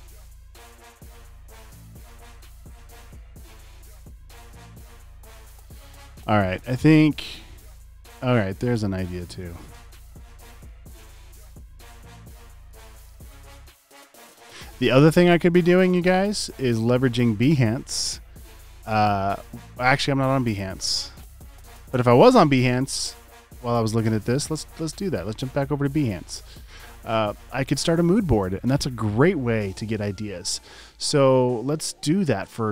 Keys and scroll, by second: 12.9 super+v, 17.4-18.1 typing.